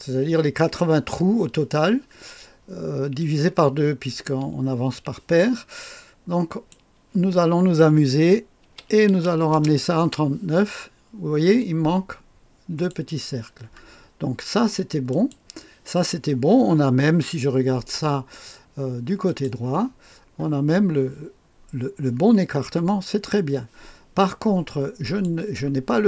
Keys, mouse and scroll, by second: 6.5 click, 8.6 KP_3, 9.0 KP_9, 9.5 Return, 11.6-13.4 drag, 15.1 click, 19.3 click, 20.0-23.0 scroll up 1, 23.0-25.0 scroll down 1, 25.0 click.